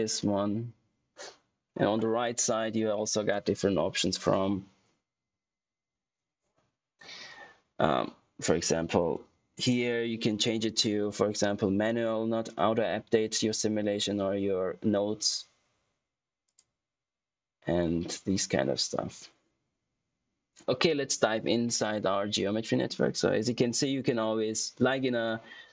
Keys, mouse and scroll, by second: 16.4 click, 17.2 typing.